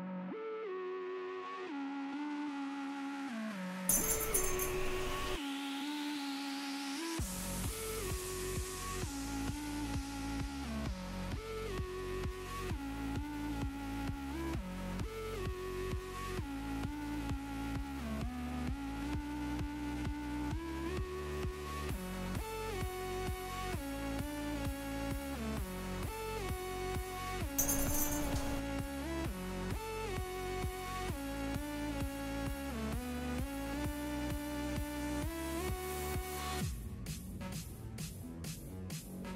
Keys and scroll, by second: 2.8 s, 18.8 s, 19.4 s, 19.8 s, 21.5 s, 22.0 s, 29.4 s.